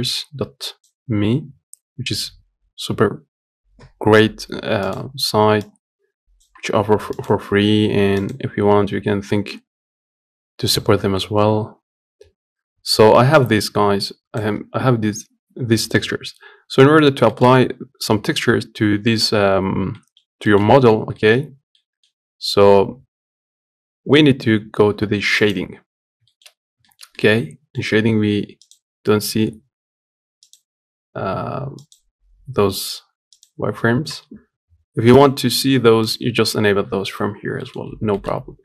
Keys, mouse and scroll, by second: 15.6-16.4 scroll down 1, 16.4 middle click, 16.7-17.0 scroll up 1, 17.0 shift+middle click, 17.3 scroll up 1, 19.7 middle click, 19.9-20.2 scroll down 2, 20.2-21.2 shift+middle drag, 21.2 scroll down 1, 21.5 middle click, 21.8-24.2 scroll up 2, 24.2-25.0 scroll up 1, 25.2 click, 25.7-26.0 scroll down 2, 26.0 shift+middle click, 26.3-26.6 scroll up 2, 26.6-34.2 shift+middle drag, 34.2-37.1 drag, 37.1 scroll down 1, 37.3 middle click, 37.5 scroll up 2, 37.9 shift+middle click, 38.0 scroll down 2, 38.3 middle click.